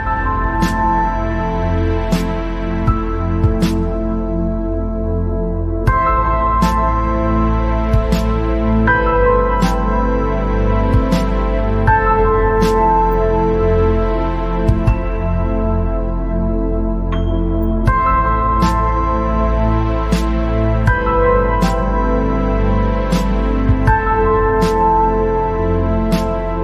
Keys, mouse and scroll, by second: 0.0 click, 1.0 g, 5.2 click, 5.5 scroll down 2, 5.7 middle click, 6.3-7.0 scroll up 10, 7.3 scroll down 3, 7.4-9.1 middle drag, 9.1 scroll down 4, 9.6 scroll up 2, 10.4 scroll up 5, 11.0-11.7 scroll down 8, 11.8 scroll up 2, 14.0 click, 14.1-14.4 scroll down 4, 14.5-15.0 scroll up 5, 15.1 scroll down 3, 15.3-18.4 middle drag, 20.2 scroll down 5, 20.6-21.2 scroll up 7, 21.6 scroll down 1, 21.6-22.8 middle drag, 22.8 scroll down 3, 23.2 middle click, 24.0-24.4 scroll up 1, 24.4-26.4 middle drag, 26.4 KP_3.